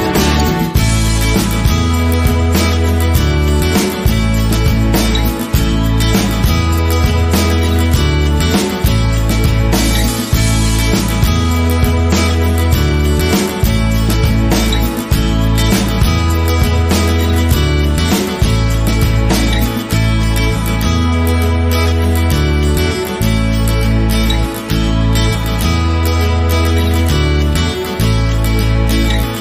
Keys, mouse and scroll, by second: 1.2-2.9 shift+middle drag, 1.5-1.8 scroll up 1, 2.1-2.6 scroll up 1, 2.6 shift+d, 2.9 right click, 3.1 s, 3.9 click, 4.2 s, 4.5 click, 4.5-4.9 scroll down 1, 4.9 scroll up 1, 5.0 middle click, 5.2 scroll down 1, 5.3 click, 5.6 ctrl+z, 5.6 middle click, 5.7-6.1 scroll up 1, 6.1 click, 6.3-8.3 middle drag, 8.3 click, 8.8 Tab, 9.0 scroll down 1, 10.2 Tab, 10.3-11.7 middle drag, 10.5 scroll down 2, 10.7 KP_7, 10.9-11.4 scroll up 4, 11.1 KP_1, 11.7 click, 12.6 Delete, 12.7 scroll down 1, 13.0 click, 13.2 scroll up 1, 13.3 middle click, 13.5 scroll down 1, 13.6 Tab, 13.8 click, 14.6 click, 14.7 scroll up 1, 15.4 click, 15.9 middle click, 16.1 click, 16.1 shift+middle click, 16.4 click, 16.5 middle click, 16.9 click, 17.1 scroll down 1, 17.1 middle click, 17.4 click, 17.7 scroll up 1, 18.3-18.9 drag, 18.7 KP_1, 18.8 scroll up 1, 18.9 shift+middle click, 19.2 click, 19.5 shift+middle click, 19.8 scroll up 1, 20.1 scroll down 1, 20.2 click, 21.0-22.7 drag, 23.1 right click, 23.3 click, 23.9-24.9 drag, 24.9 right click, 25.0-26.3 middle drag, 25.1 scroll down 2, 25.3 scroll up 2, 26.2 scroll down 2, 26.3 click, 26.3 scroll up 2, 26.4-28.2 middle drag, 28.2 drag.